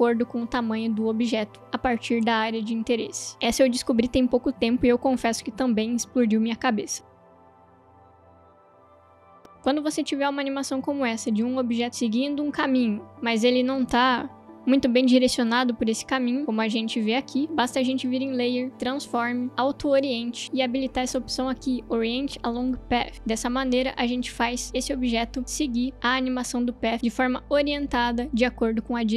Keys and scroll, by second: 16.4 space, 24.4 space.